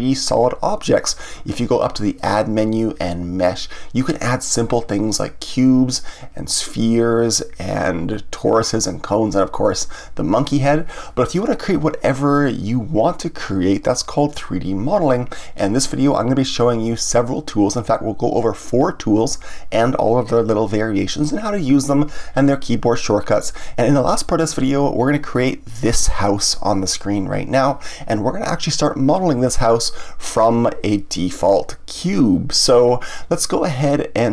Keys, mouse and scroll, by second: 2.1-5.2 drag, 25.7 click, 25.8-27.6 middle drag, 27.6-28.0 scroll down 1, 28.0-29.0 scroll up 1, 29.0-34.3 middle drag.